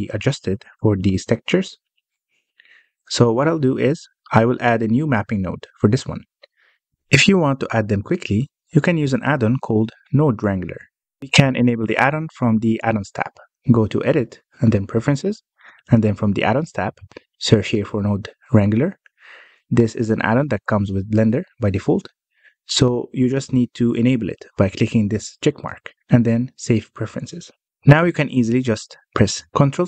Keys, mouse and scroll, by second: 0.2-0.6 scroll down 5, 0.6-1.1 middle drag, 1.1 scroll down 1, 2.9-4.6 middle drag, 4.6-5.1 scroll up 3, 5.1 click, 5.6-6.5 scroll down 6, 6.5 middle click, 6.9-8.2 scroll up 1, 8.2-11.3 middle drag, 11.5-14.6 drag, 28.0-28.4 scroll up 1, 28.4 middle click, 28.9 click, 29.3-29.8 middle drag.